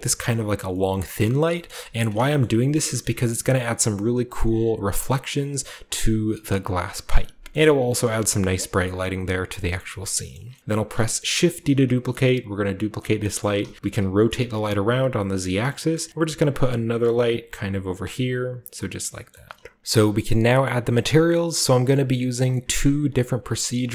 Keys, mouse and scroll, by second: 0.1 drag, 1.5 shift+middle click, 2.0-2.8 shift+middle drag, 2.4-5.0 scroll up 1, 3.0-5.0 shift+middle drag, 5.2-7.0 scroll down 1, 7.5 shift+middle drag, 7.5-8.0 shift+scroll down 1, 8.0 shift+middle drag, 8.0-9.2 shift+scroll up 1, 8.3-9.6 shift+middle drag, 9.2-10.1 scroll down 5, 9.7 middle drag, 10.0 shift+middle click, 10.3 shift+middle drag, 10.3-11.4 scroll up 3, 10.6-12.8 shift+middle drag, 11.4 shift+d, 12.8-15.4 drag, 13.0-15.4 scroll down 2, 13.6 r, 13.7 z, 15.4-17.6 typing, 19.8-20.4 typing, 20.6-21.2 middle drag, 21.4-23.6 shift+scroll up 5, 21.4-21.8 shift+middle drag, 22.1-22.4 shift+middle drag, 22.7-23.6 middle drag, 23.6 shift+scroll up 1, 23.7 middle click.